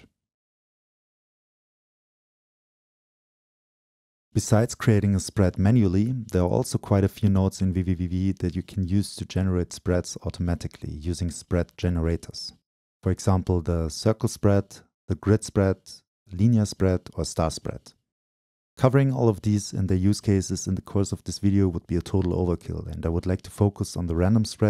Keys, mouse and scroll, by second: 1.6-3.9 right drag, 3.9-7.6 drag, 8.4-11.0 drag, 12.7 click, 15.4-17.5 scroll down 2, 17.5-19.0 scroll down 1, 19.0-22.2 scroll down 1, 22.2-24.5 scroll up 2, 24.5 scroll up 1.